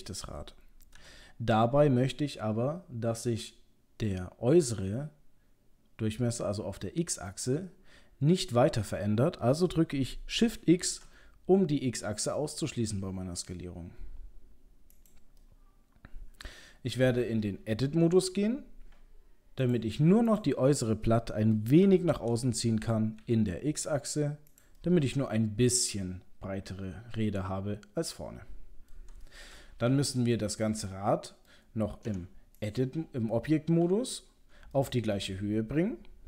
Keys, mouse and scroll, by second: 0.3-1.0 scroll up 1, 1.0 s, 15.4 middle click, 18.0 Tab, 19.6 click, 20.3 click, 21.2 middle click, 21.5 middle click, 21.8 g, 24.8 middle click, 28.9 middle click, 29.2 middle click, 29.9 KP_3, 30.9 middle click, 31.5 middle click, 32.1 Tab, 32.6 click, 33.8 KP_3, 34.3 scroll up 2, 34.7 shift+middle click, 35.3-35.7 scroll down 4, 35.8-36.2 scroll up 2.